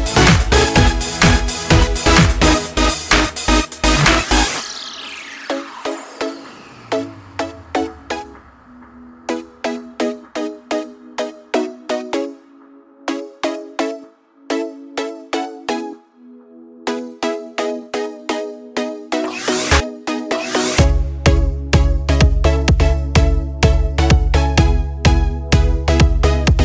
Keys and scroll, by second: 4.4 ctrl+t, 14.5 ctrl+t, 18.6 Delete.